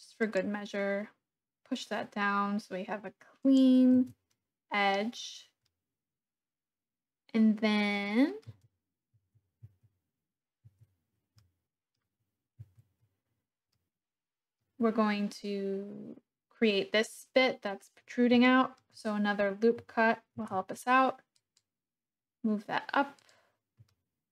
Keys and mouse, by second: 3.4 click, 4.0 Tab, 4.3 click, 5.7-7.5 drag, 7.5-8.5 middle drag, 8.6 Tab, 9.1 Tab, 9.6 Tab, 10.6 Tab, 11.4 click, 12.6 Tab, 13.7 middle click, 18.4 shift+middle click, 20.3 ctrl+r, 23.1 click, 23.9-24.3 shift+drag.